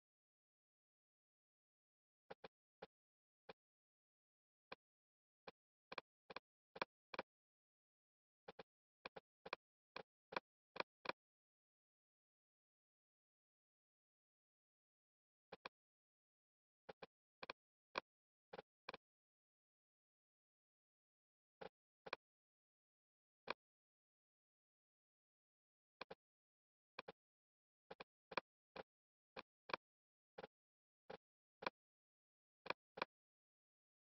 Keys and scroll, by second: 19.9 super+z.